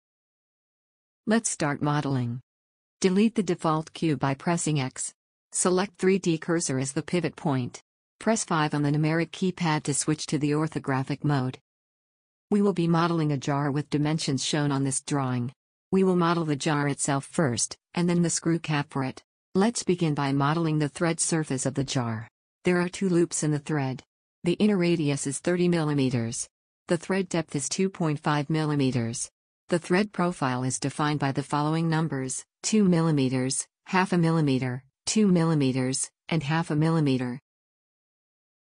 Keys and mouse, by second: 3.7 x, 7.6-12.4 drag, 9.2 KP_5.